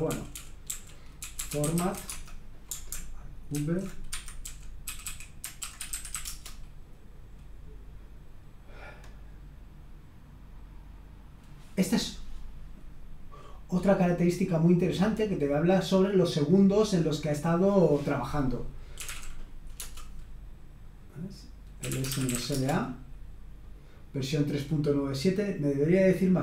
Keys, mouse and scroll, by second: 0.0-2.5 typing, 3.5 ctrl+alt+v, 4.1 Escape, 4.5-6.6 typing, 15.3-16.5 drag, 18.7-19.5 typing, 19.7 Return, 21.6-22.8 typing.